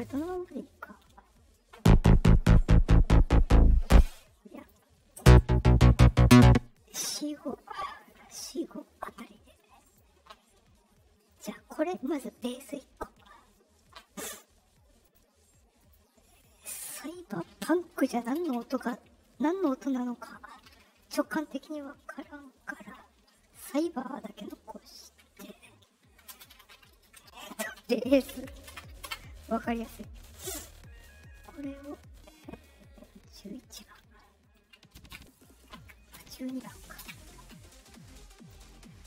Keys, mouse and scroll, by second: 0.0 click, 4.5 click, 9.8 click, 11.1 scroll up 2, 11.9 click, 15.0 click, 15.7 click, 16.6 click, 20.6 Left, 21.0 Left, 26.2 space, 28.6 Return, 34.3 middle click, 34.3 scroll up 2, 36.3 middle click, 36.3 scroll.